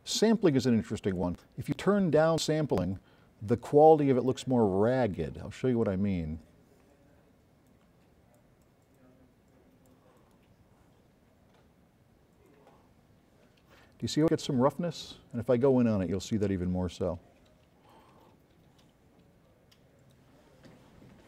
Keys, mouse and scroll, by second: 1.2 click, 6.0-6.3 drag, 9.5 click, 16.9 scroll up 2.